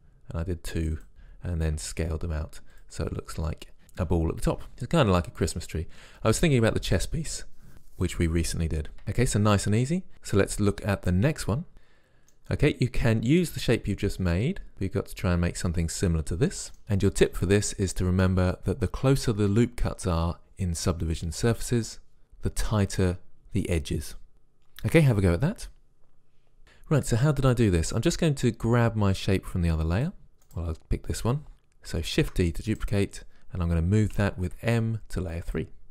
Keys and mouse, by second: 1.8 s, 13.7 click, 13.9 click, 30.0 click, 30.2 right click, 32.2 shift+d, 34.2 m.